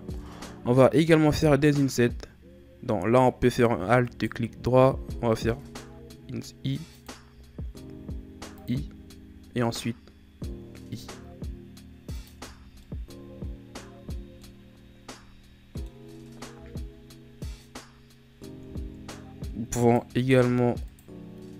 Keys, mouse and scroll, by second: 0.1 Tab, 0.7 middle click, 1.2 right click, 4.1 alt+right click, 5.6 i, 7.3 i, 12.4 Tab, 12.6 scroll down 2, 12.8-16.5 middle drag, 16.5 KP_1, 18.2-18.6 scroll up 2, 18.6 Tab, 19.8 right click, 20.2 b.